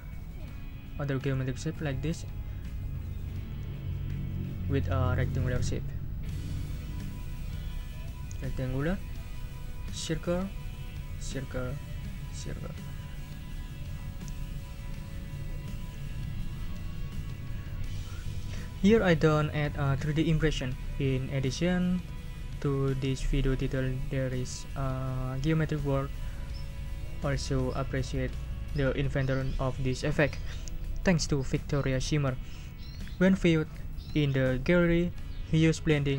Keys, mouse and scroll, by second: 6.5 scroll down 2, 7.8 scroll up 2, 9.4 scroll down 2, 10.6 scroll down 2, 11.6 scroll down 2, 13.7 scroll down 2, 14.3 scroll up 2.